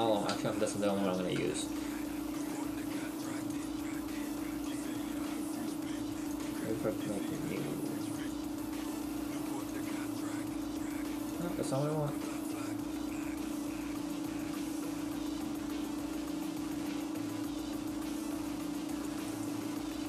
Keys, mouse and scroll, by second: 0.3 Tab, 4.8 click, 7.4 click, 9.9 click, 12.4 click.